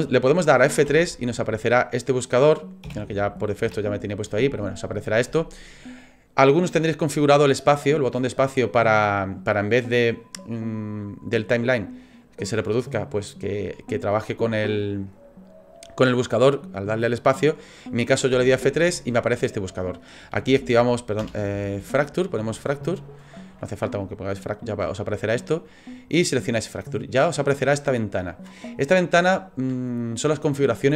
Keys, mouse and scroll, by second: 0.9 F3.